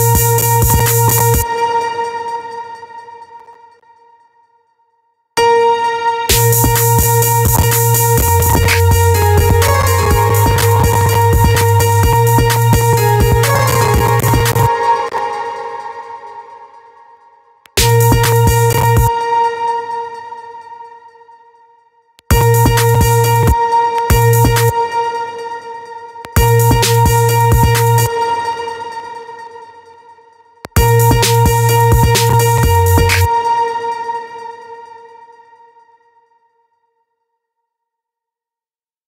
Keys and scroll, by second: 1.7 space, 5.9 space, 14.1 space, 17.1 space, 18.5 space, 21.6 space, 25.7 space, 27.5 space, 30.0 space, 33.0 space.